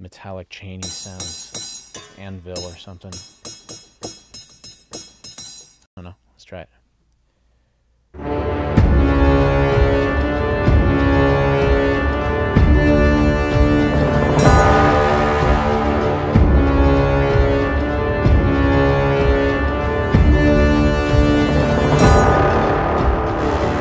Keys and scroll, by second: 5.9 space.